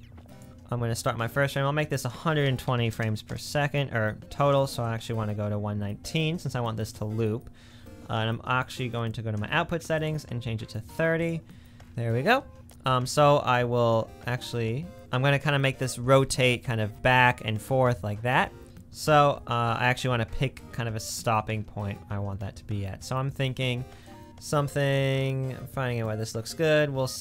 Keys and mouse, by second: 6.2-8.7 middle drag, 8.8-10.0 middle drag, 19.0 n.